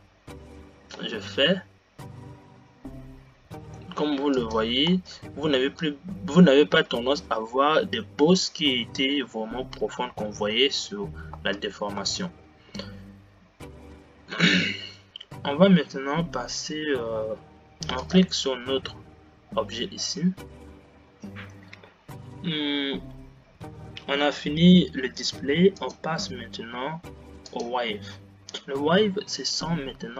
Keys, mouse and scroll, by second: 5.5 space, 11.5 space, 19.2 click, 20.2-20.6 scroll down 5, 28.1-29.1 drag.